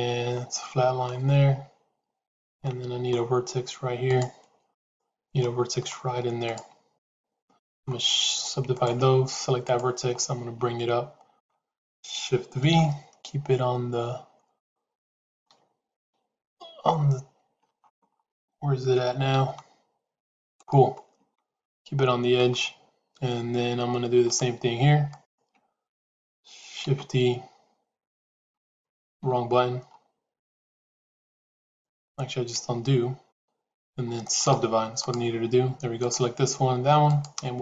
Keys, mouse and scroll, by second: 2.5 middle click, 4.6 click, 5.3 middle click, 10.1-11.3 middle drag, 12.6 shift+v, 15.9 KP_3, 16.8 KP_Decimal, 19.2 g, 20.9-22.3 middle drag, 24.3 click, 26.7 shift+d, 29.1 x, 32.0 ctrl+z, 32.5 ctrl+z.